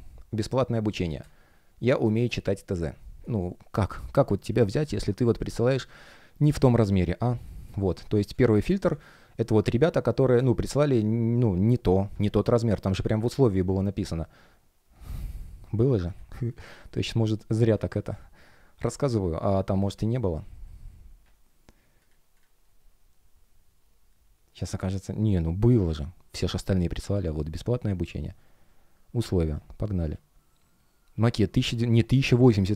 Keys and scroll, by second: 7.3 space.